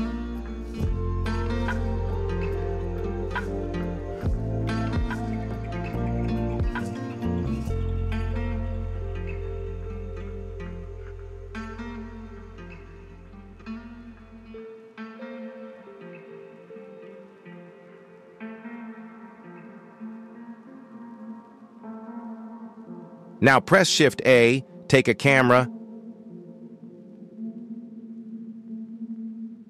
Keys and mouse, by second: 0.6-1.0 shift+middle drag, 1.6 KP_1, 2.9 middle click, 4.3 g, 6.7 y, 6.7 y, 6.8 y, 7.4-9.3 middle drag, 10.6-11.4 middle drag, 12.4 KP_7, 14.3 s, 15.1 s, 15.1 s, 15.5 g, 17.1 y, 17.2 y, 17.5-18.1 middle drag, 19.5 KP_1, 20.4 shift+middle drag, 21.4 shift+middle click, 22.1 shift+a, 24.6 ctrl+alt+KP_0, 25.6 g.